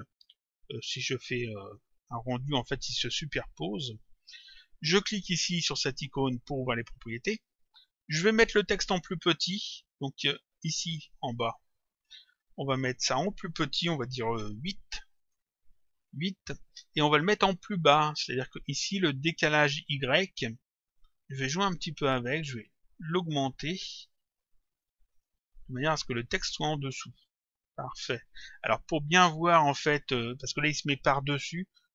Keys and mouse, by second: 1.1 click, 3.9 click, 6.7 click, 7.9 click, 11.6 click, 12.9 click, 15.3 click, 18.2 click, 21.0 click, 23.0 click, 25.2 click, 29.2 click.